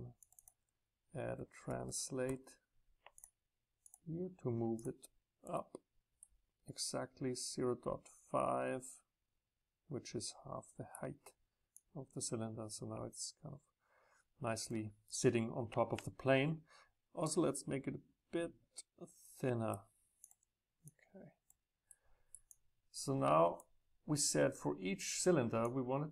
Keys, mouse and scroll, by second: 3.2-5.4 drag, 5.4-6.1 middle drag, 6.1-7.6 right drag, 7.6 click, 7.7 right click, 7.8-11.7 drag, 13.3-16.5 drag, 17.4-18.5 middle drag, 18.5 click, 18.8 middle click, 18.9 click, 22.4-25.5 drag, 25.7-26.1 drag.